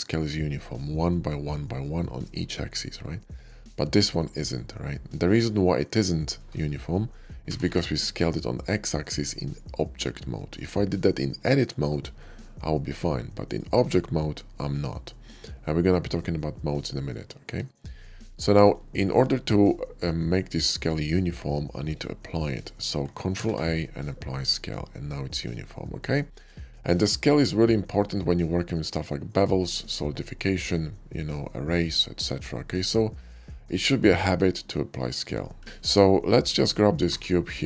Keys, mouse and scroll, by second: 3.0 click, 3.6 shift+middle click, 5.0-5.8 shift+middle drag, 7.3 s, 7.6 x, 13.3 click, 14.9-16.0 middle drag, 17.0 middle click, 17.7 shift+middle click, 18.0-18.4 shift+middle drag, 18.7 shift+middle click, 23.4 ctrl+a, 24.1 click, 26.1 shift+middle click, 26.4 middle click, 26.7 g, 35.6 shift+middle click, 36.8 g, 37.4 right click.